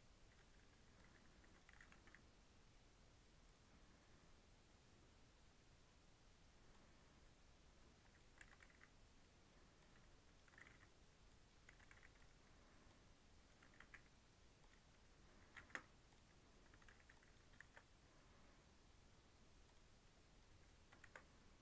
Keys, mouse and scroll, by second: 0.5 1, 0.9 click, 1.6 g, 6.6-8.3 drag, 8.3 g, 9.7 click, 10.4 g, 11.6 g, 12.8 click, 13.5 g, 15.2 Tab, 15.5 ctrl+a, 16.6 Tab, 16.8 2, 17.0 click, 17.5 ctrl+b, 20.3 click, 21.0 ctrl+b.